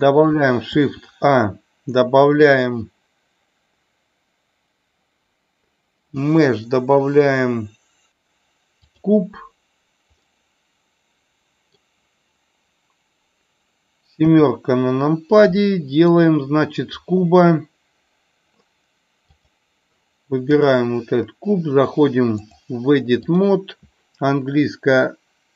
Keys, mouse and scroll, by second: 10.1-11.8 middle drag, 14.2 KP_7, 15.6-16.1 shift+middle drag, 19.5 click, 20.5 click, 22.3-23.6 drag.